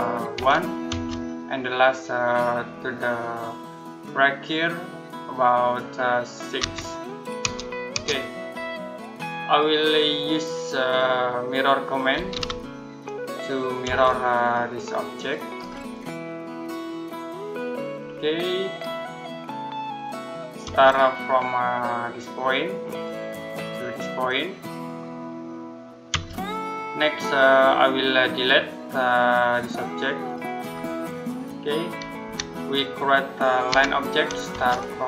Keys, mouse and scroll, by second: 0.2 1, 0.7 space, 6.4 6, 7.3 Return, 11.7-13.7 typing, 14.2 click, 15.4-15.7 scroll up 1, 15.7 click, 17.6-18.4 scroll down 1, 18.6-19.8 scroll up 1, 19.8 click, 20.5 space, 22.7 click, 25.9 space, 26.8 middle click, 28.1 click, 32.1 Delete, 33.5 l, 34.3 space.